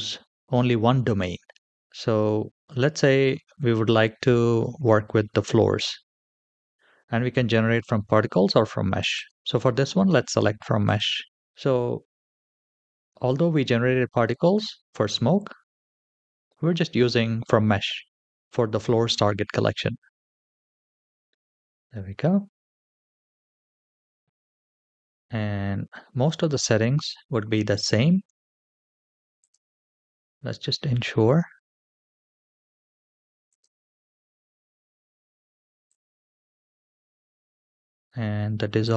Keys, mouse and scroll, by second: 0.4-1.7 drag, 9.0 click, 10.6-20.5 drag, 21.7-23.2 middle drag, 24.3-27.9 scroll down 4, 29.3 click, 30.8-31.7 scroll down 3, 31.7-32.2 scroll down 1, 32.2-33.3 scroll down 1, 33.3 click, 35.7 click, 36.5-38.7 scroll down 4.